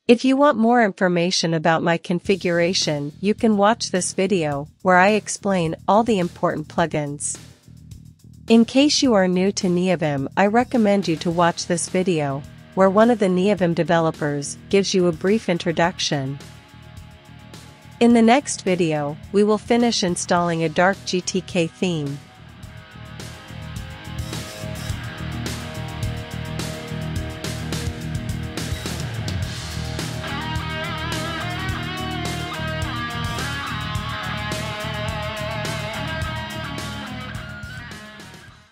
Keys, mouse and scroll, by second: 0.0-1.9 typing, 8.1-15.9 typing, 17.0-18.9 typing, 19.1 Tab, 19.3 Return.